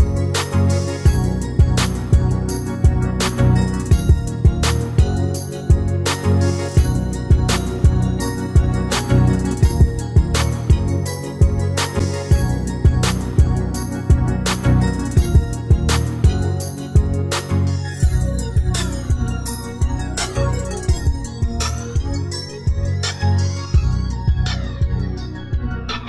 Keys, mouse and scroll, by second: 0.4 click, 1.0 right click, 1.5-2.6 drag, 2.7-3.8 right drag, 3.8-4.8 drag, 5.0-6.8 middle drag, 6.8 a, 7.6 s, 8.7 click, 13.5 s, 17.9 s, 18.0 x, 18.4 a, 18.6 s, 19.8 click, 20.1 middle click, 20.5-23.1 drag, 23.6 middle click.